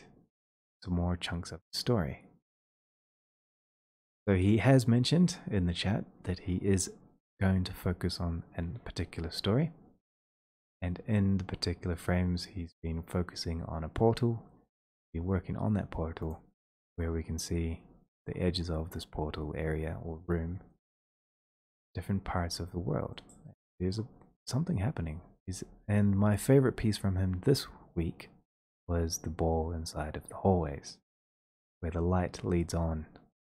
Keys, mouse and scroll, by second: 3.0 click, 4.6-9.7 drag, 10.7 click, 12.5 middle click, 12.9 click, 13.5 click, 13.5 middle click, 14.6 click, 14.8 click, 14.9 right click, 15.5 scroll, 16.3 click, 16.6-17.0 scroll, 17.4 middle click, 22.8 scroll, 23.8-25.1 scroll, 25.2 scroll, 25.9-26.9 scroll, 26.9-27.9 scroll, 29.1 scroll.